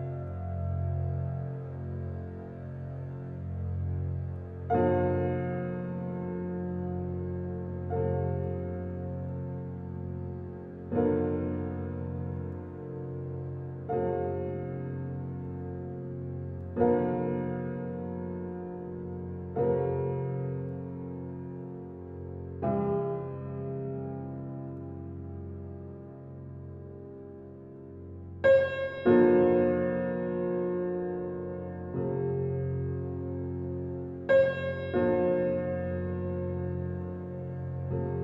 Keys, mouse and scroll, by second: 0.6-1.5 middle drag, 2.3 click, 2.6-3.0 scroll down 3, 3.0-3.4 middle drag, 3.4-6.9 drag, 9.0 click, 9.3 click, 9.5 scroll down 1, 9.5 scroll up 5, 11.2 click, 12.0 Tab, 12.3-12.7 scroll up 4, 12.7-14.2 middle drag, 15.7 Tab, 16.0-16.8 scroll down 5, 16.8-17.2 drag, 17.4-18.6 middle drag, 18.6 click, 23.3 click, 23.7-24.1 scroll down 2, 24.1-29.1 middle drag, 29.1 scroll up 1, 29.4-31.6 middle drag, 33.3-34.7 drag, 34.7 Tab, 35.5 click, 37.0-37.8 drag, 37.8 Tab, 37.9-38.2 drag.